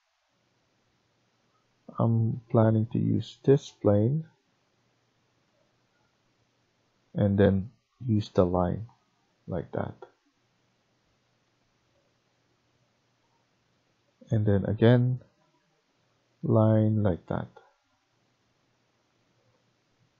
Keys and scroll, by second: 4.2 Tab, 4.7 Tab.